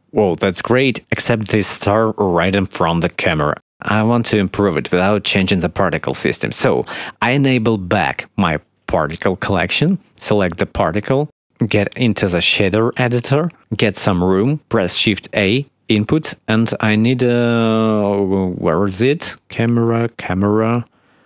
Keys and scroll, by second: 4.2 space, 15.5 shift+a.